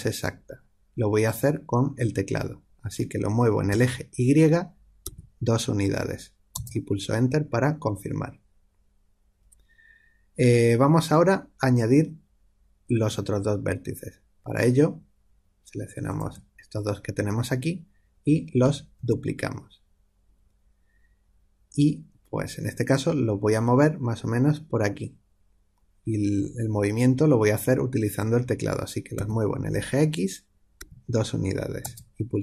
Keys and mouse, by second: 16.0 click, 19.0 shift+d.